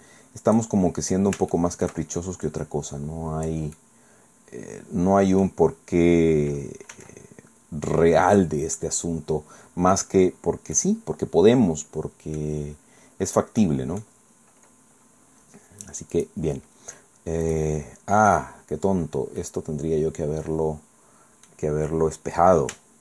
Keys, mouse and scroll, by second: 1.5 shift+click, 2.4-3.7 drag, 3.8-5.6 drag, 6.9 s, 8.3 click, 8.8-10.2 drag, 10.3 scroll down 2, 10.8-12.6 drag, 13.6 click, 14.2-14.6 scroll up 2, 14.8-15.4 scroll down 2, 16.2 click, 17.4 click, 17.9-18.2 scroll down 1, 18.4-19.8 scroll down 3, 19.4 click.